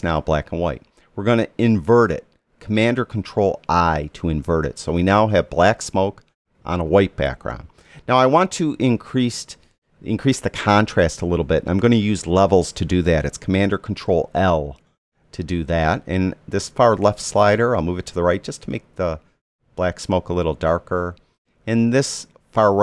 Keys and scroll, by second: 4.0 super+i, 14.5 super+l.